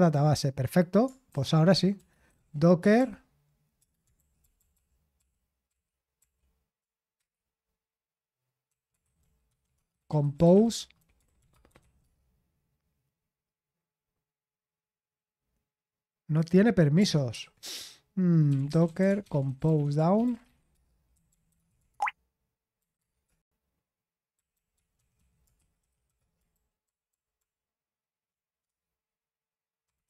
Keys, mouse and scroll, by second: 4.4 ctrl+p, 4.5 ctrl+p, 4.7 ctrl+p, 7.1 Return, 8.4-12.5 typing, 18.2-30.0 typing.